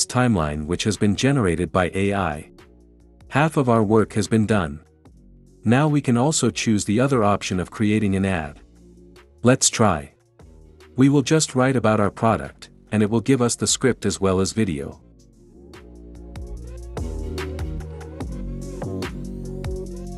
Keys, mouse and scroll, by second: 2.9-3.9 drag, 4.9 click, 7.3-9.2 drag, 10.2-10.8 drag, 11.9-13.0 drag, 12.9-15.6 typing, 16.1 click, 16.7-17.5 typing, 17.7 click.